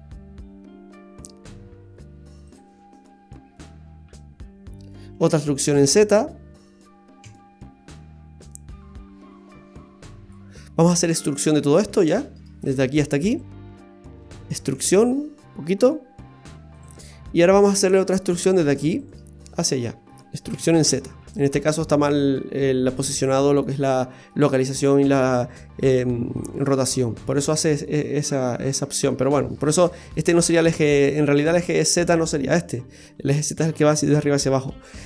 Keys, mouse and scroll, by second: 3.5 middle click, 5.8 e, 10.4 middle click, 10.9 right click, 11.4 right click, 12.6 right click, 13.4 ctrl+shift+right click, 14.2 middle click, 14.7 e, 17.1 middle click, 18.5 right click, 19.0 shift+right click, 19.4 middle click, 20.5 e, 23.6 middle click, 27.4 scroll down 2, 27.8 middle click, 31.4 middle click.